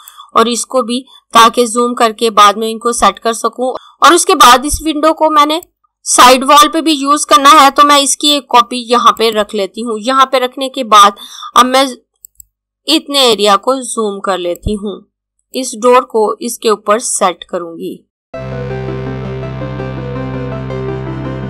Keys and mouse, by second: 5.6 click, 9.0 click, 12.0 click, 18.7 click, 19.6 right click, 19.8 click.